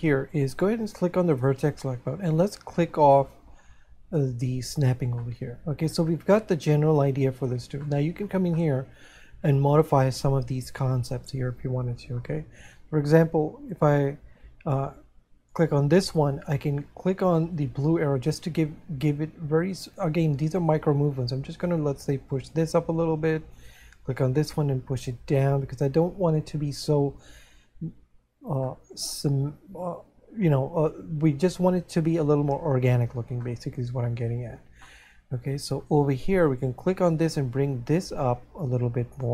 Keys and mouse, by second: 5.8 middle click, 7.8 middle click, 9.2 middle click, 17.7 click, 24.8 click, 28.8 middle click, 33.4 middle click, 37.5 click.